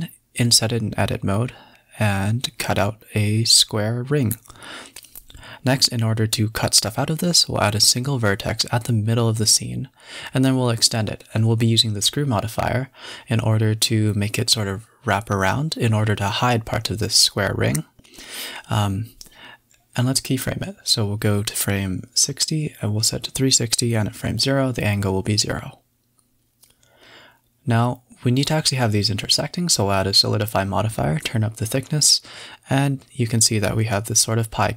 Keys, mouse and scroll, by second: 0.7 x, 2.8 Tab, 4.6 shift+a, 7.0-7.6 scroll up 8, 7.6-7.9 scroll down 5, 7.9 Tab, 8.4 a, 9.0 Tab, 9.8 e, 11.4-11.7 scroll down 4, 11.7 Tab, 12.7 click, 13.0 click, 13.2-18.3 drag, 20.2 click, 21.1 click, 21.5-22.6 drag, 23.7-24.3 scroll up 1, 24.3 middle drag, 24.6-25.0 scroll up 9, 25.0-26.1 middle drag, 26.1 g, 26.9 click, 27.2 g, 28.3 middle click, 29.0-30.1 drag, 30.1 middle click, 30.9-34.7 drag.